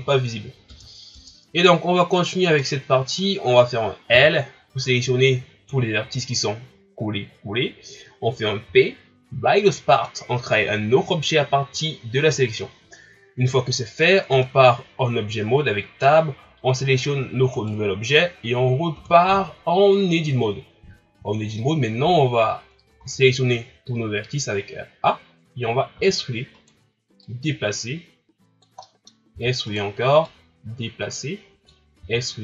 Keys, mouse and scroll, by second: 0.7 Tab, 1.1 Tab, 2.1 right click, 2.6-4.1 middle drag, 4.1 l, 8.6 p, 14.3 Tab, 17.5 right click, 18.9 Tab, 21.3-23.0 shift+scroll up 1, 23.0 a, 25.9 e, 27.2-28.8 drag, 28.8 middle click, 29.1 scroll up 1, 29.3 e, 30.2-32.0 drag, 32.0 e.